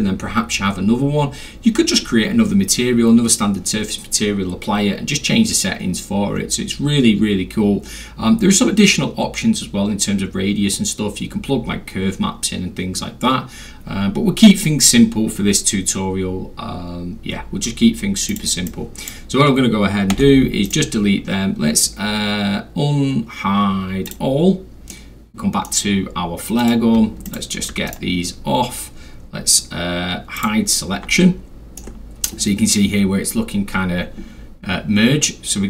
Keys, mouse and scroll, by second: 16.2 middle click, 16.2-16.7 scroll down 3, 16.6 middle click, 17.9 middle click, 17.9 scroll down 2, 18.3 click, 18.3 scroll, 18.7 click, 20.1 Delete, 20.7 right click, 24.1 click, 24.9-25.6 middle drag, 25.9 scroll up 2, 26.2 scroll, 26.6 click, 27.0-28.0 ctrl+scroll, 27.2 click, 27.9 ctrl+right click, 30.3 click, 31.2 alt+middle click.